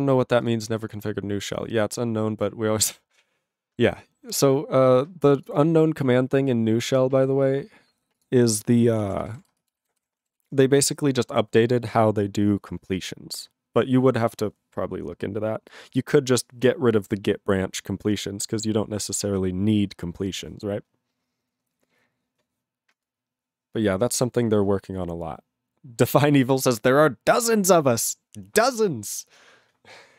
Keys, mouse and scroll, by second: 9.0 ctrl+space, 9.0 ctrl+a, 9.1 ctrl+n, 9.2 ctrl+n, 9.3 ctrl+g, 9.3 ctrl+e, 9.5 ctrl+space, 9.9 ctrl+alt+b, 10.0 ctrl+g, 10.4 ctrl+s.